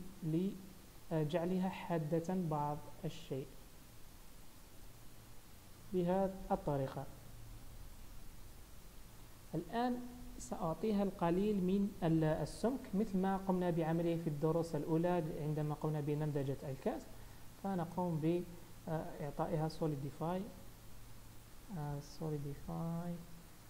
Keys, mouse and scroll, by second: 5.2 Tab, 5.5-6.7 scroll down 5, 6.7 middle click, 9.5-10.2 scroll up 4, 10.2 middle click, 13.3 click, 15.9 click, 21.1-22.2 scroll down 4, 22.7-23.1 scroll down 1.